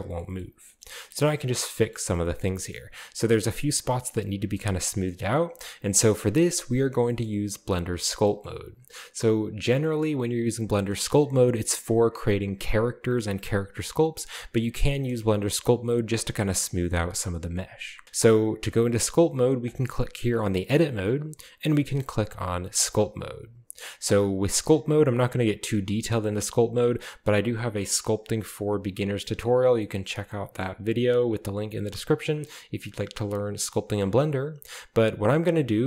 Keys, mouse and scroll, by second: 2.5 shift+middle click, 2.7 shift+middle click, 2.8 shift+middle click, 4.5-7.0 shift+middle drag, 4.5-5.3 shift+scroll up 1, 5.3-7.0 scroll down 1, 7.2 shift+middle click, 8.2-9.0 middle drag, 9.8 shift+middle drag, 10.1-12.9 scroll down 2, 10.3 middle click, 14.5-15.2 scroll up 3, 14.6-15.2 middle drag, 15.2-15.9 shift+middle drag, 19.6 click, 22.7 click, 29.8-31.2 shift+middle drag, 33.9 shift+middle click.